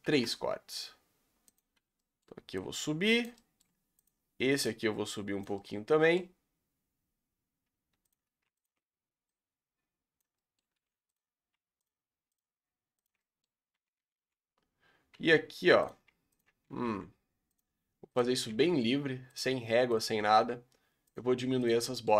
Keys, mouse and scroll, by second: 0.0 ctrl+r, 2.0 middle click, 2.6 click, 3.3 middle click, 4.0 alt+click, 5.6-8.1 middle drag, 8.1 alt+click, 10.3 middle click, 10.8 1, 11.1 click, 12.3 shift+click, 13.0 shift+click, 13.2 middle click, 14.0 g, 16.3 shift+click, 16.7 g, 18.1 click, 18.4 g, 19.9 click, 20.2 g, 21.6 click, 21.9 middle click.